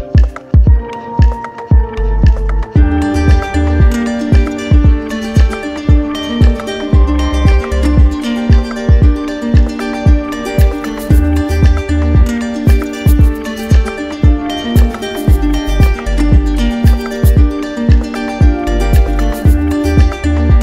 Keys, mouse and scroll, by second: 0.3-1.4 drag, 1.8 click, 5.2 click, 5.7 click, 6.7 click, 7.0 alt+click, 7.1 alt+click, 8.9 click, 9.4 alt+click, 10.2 click, 12.4 click, 13.1 shift+click, 13.8 alt+click, 14.6 click, 15.1 click, 15.8 alt+click, 17.3 alt+click, 17.8 alt+click, 18.8 click.